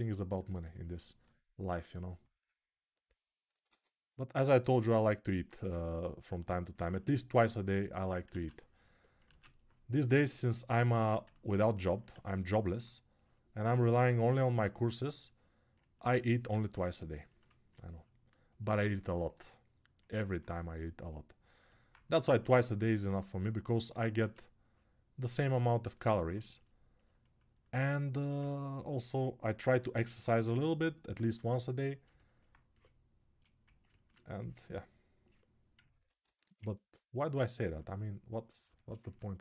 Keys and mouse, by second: 3.4 ctrl+z, 5.2-26.8 ctrl+drag, 8.2 ctrl+z, 9.1 ctrl+z, 32.1-39.4 alt+drag.